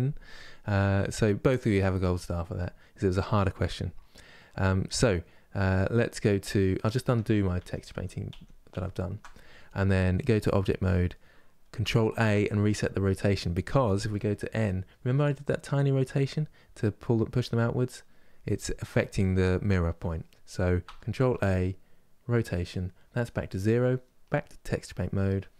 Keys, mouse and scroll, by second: 6.7 middle click, 7.2 ctrl+z, 7.6 ctrl+z, 10.3-13.7 drag, 13.7 n, 22.0 ctrl+a, 24.5-25.5 drag.